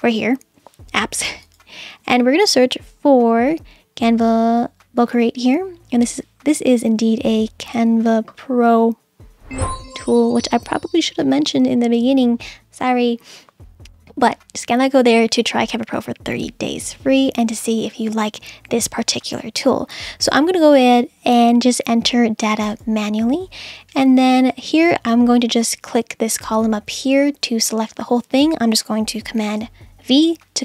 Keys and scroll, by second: 29.4 super+v.